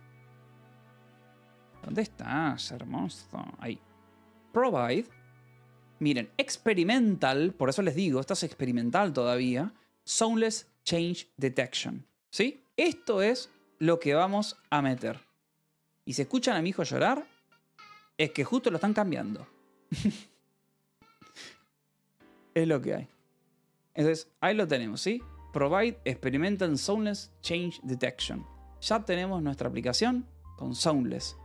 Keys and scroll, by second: 0.2 alt+Tab, 0.4-2.1 typing, 2.5 Return, 3.6-5.8 typing, 7.4 ctrl+n, 8.1 Return, 10.4 Escape, 11.6-13.6 typing, 14.2 Return, 14.5 Escape, 15.3 k, 17.3-19.9 typing, 20.4 ctrl+s, 21.2-26.0 typing, 26.4 Escape, 27.2 ctrl+s, 28.2 k, 28.8 j.